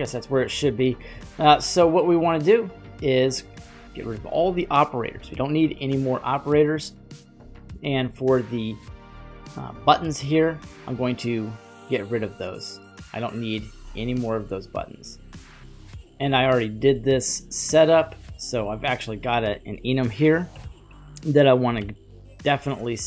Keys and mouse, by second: 5.1 Delete, 5.4 Delete, 8.7-10.1 middle drag, 11.4 ctrl+click, 20.5 ctrl+p, 21.8 h, 22.5 g.